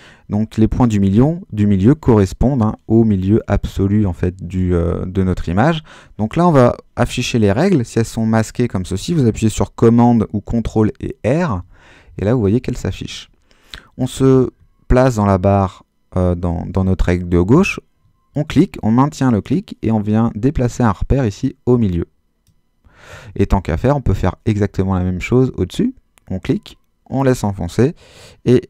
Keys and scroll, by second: 8.2 super+r, 11.5 super+r.